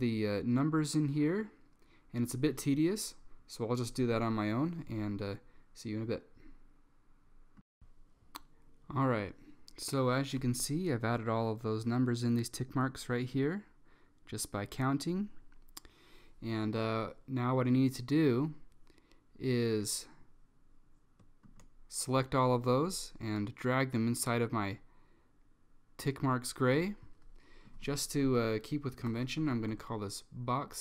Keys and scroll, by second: 28.3 Left, 29.0-30.6 typing.